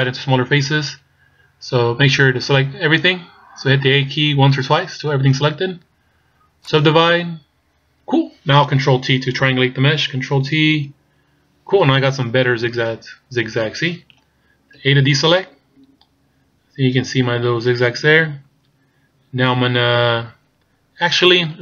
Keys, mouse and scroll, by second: 6.6 click, 10.8 ctrl+t, 11.8-12.5 scroll up 1, 12.5 scroll up 2, 14.8 a, 20.6-21.6 scroll down 3.